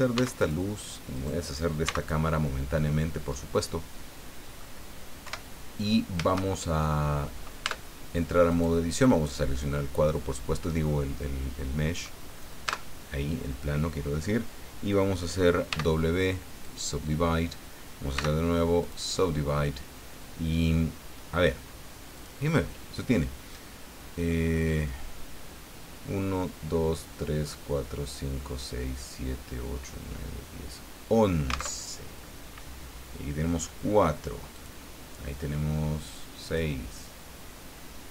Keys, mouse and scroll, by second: 0.1 x, 0.4 right click, 1.1 right click, 1.8 x, 2.0 right click, 2.6-2.9 scroll down 2, 3.0-4.8 middle drag, 5.2 KP_7, 6.5 shift+middle click, 7.6 Tab, 8.5 right click, 12.7 Tab, 15.7 w, 16.6 click, 18.1 w, 18.8 click, 22.1 click, 31.8 alt+Tab, 34.5 click, 36.5 click.